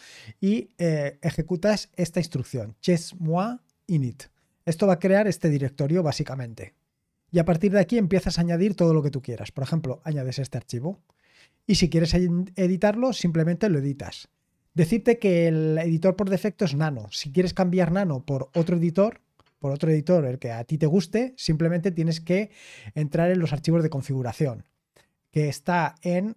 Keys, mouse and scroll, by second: 11.1-12.8 scroll down 1, 12.8-26.3 drag.